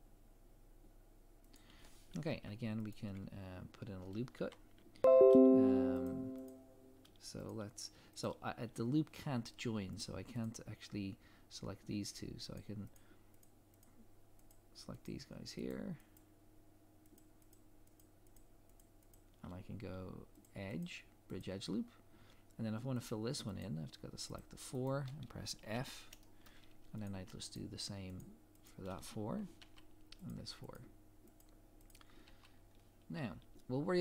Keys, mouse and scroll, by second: 2.9 alt+click, 6.1 click, 10.4 shift+click, 20.4 click, 22.0 scroll up 1, 23.1 click, 23.6 shift+click, 25.7 f, 26.2 shift+middle click, 27.0 click, 27.5 shift+click, 29.6 f, 30.3 click, 30.7 shift+click, 32.2 f, 32.5 scroll down 1.